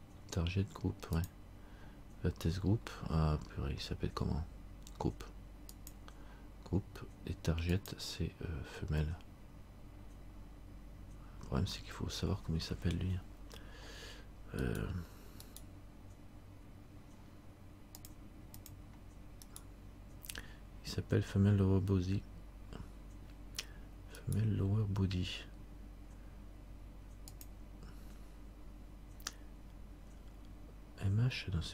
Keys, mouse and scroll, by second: 1.3 click, 7.9 click, 15.6 right click, 18.1 click, 19.6 right click, 24.4 right click, 27.5 click.